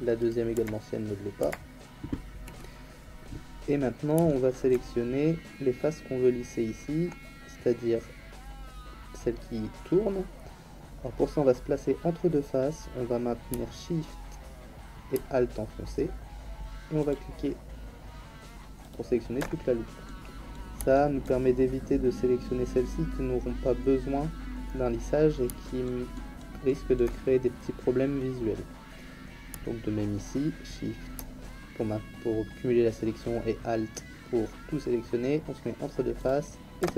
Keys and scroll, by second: 0.5 l, 1.4 l.